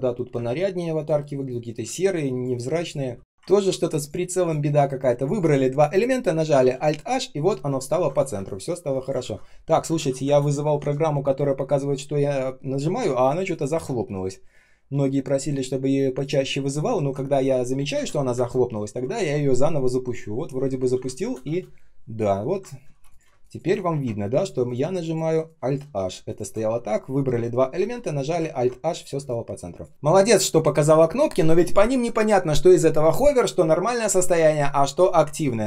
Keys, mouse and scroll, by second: 17.9 space, 18.3 space, 21.1 space, 21.4 space, 22.8 ctrl+z, 23.2 space, 23.7 ctrl+scroll up 1, 26.2 shift+click, 27.7 alt+h, 28.4 ctrl+scroll down 1, 29.1 space, 29.6 space, 29.6 space, 29.9 ctrl+scroll down 1, 30.3 space.